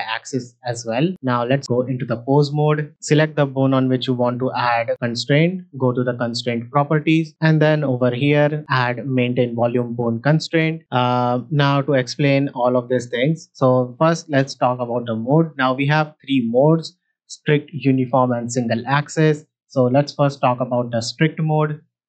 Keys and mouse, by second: 0.6 click, 1.3 ctrl+Tab, 4.9 click, 7.3-10.4 drag, 11.3 middle click, 15.3-21.0 drag, 21.3 drag.